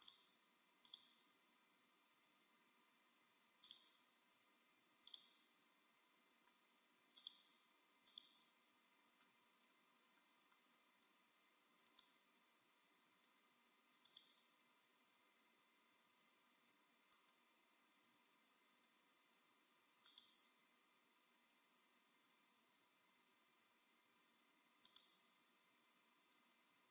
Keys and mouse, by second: 5.1-6.8 drag, 7.2-9.3 drag, 9.6 middle click, 10.6 middle click, 12.4 right click, 13.0 click, 17.9-19.2 right drag, 21.4-22.9 drag, 25.6-26.9 drag.